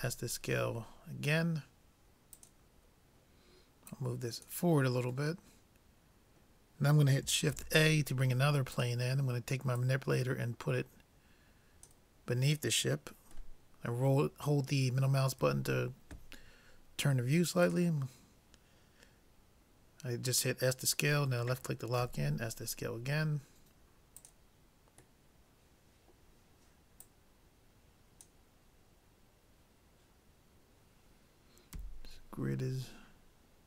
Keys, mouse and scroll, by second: 3.9-5.7 drag, 5.4 middle click, 5.9-7.2 drag, 7.6 shift+a, 9.8-11.6 drag, 13.7-15.4 middle drag, 15.4 s, 22.0 s, 25.3-27.1 middle drag, 27.1-28.8 drag, 31.8 n.